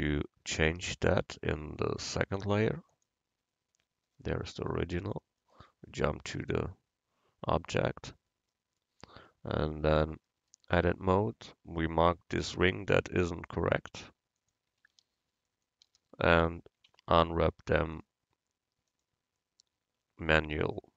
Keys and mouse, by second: 0.1 Tab, 0.9 a, 3.0-5.6 drag, 6.5 KP_Decimal, 10.9 Tab, 14.4-16.9 drag, 15.5 right click, 16.9 u, 20.3 Tab.